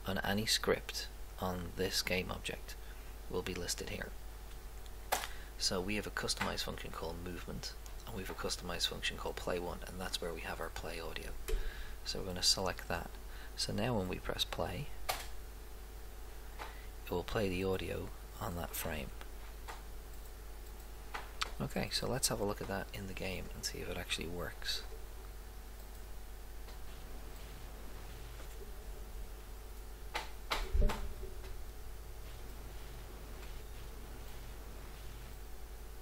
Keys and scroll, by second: 31.4 Right.